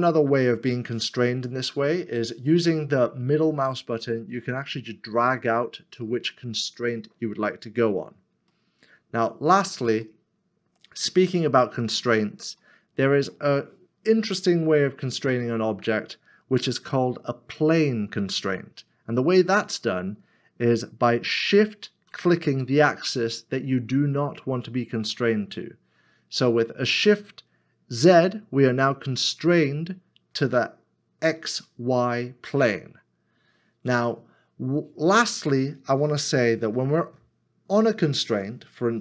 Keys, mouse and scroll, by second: 4.0 z, 4.1 middle click, 21.3 middle click, 22.1 shift+z.